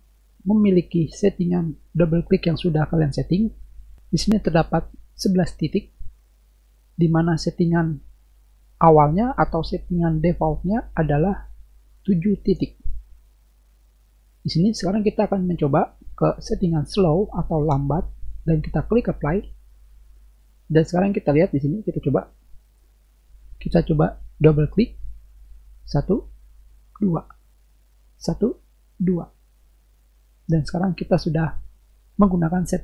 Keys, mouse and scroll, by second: 17.0-17.6 drag, 19.3 click, 22.5 click, 25.9 click, 26.9 click, 28.2 click, 28.9 click.